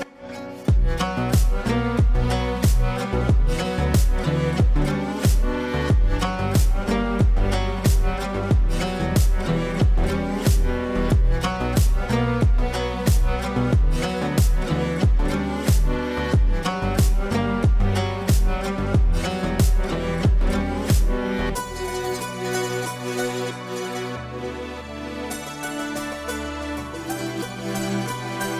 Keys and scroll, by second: 2.1 Left, 2.4 Left, 2.6 Left, 2.8 Left, 3.0 Left, 3.2 Left, 3.4 Left, 3.6 Left, 4.3 Left, 4.9 Left, 5.4 Left, 14.0 ctrl+d, 16.4 ctrl+d, 16.9 ctrl+d, 17.4 ctrl+d, 17.8 ctrl+d, 18.2 ctrl+d, 18.8 ctrl+d.